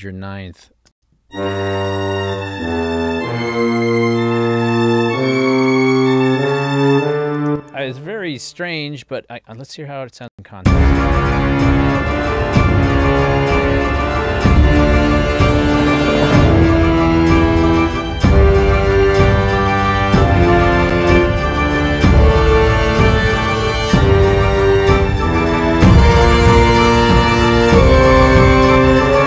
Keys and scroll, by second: 1.0 space, 7.5 space, 10.4 space.